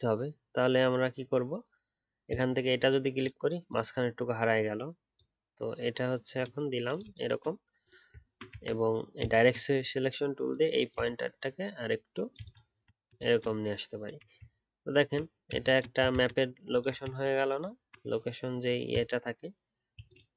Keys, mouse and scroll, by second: 8.2-8.7 alt+scroll up 3, 12.6 alt+scroll down 1, 14.4 alt+scroll down 6, 14.8-16.1 alt+scroll up 1, 17.7-19.3 alt+scroll up 1.